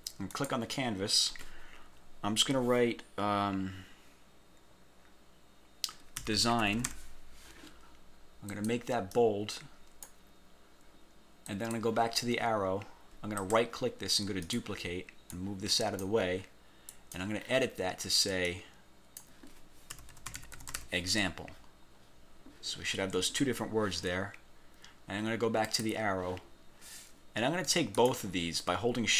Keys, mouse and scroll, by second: 0.4 click, 6.1-7.5 typing, 8.6 click, 9.2-10.4 drag, 11.6 click, 12.3 scroll down 1, 12.8 scroll up 1, 13.5 click, 14.6 click, 15.4 click, 17.0 click, 18.6 click, 19.8-21.3 typing, 21.6-22.4 scroll up 4, 25.8 click, 28.0 shift+click.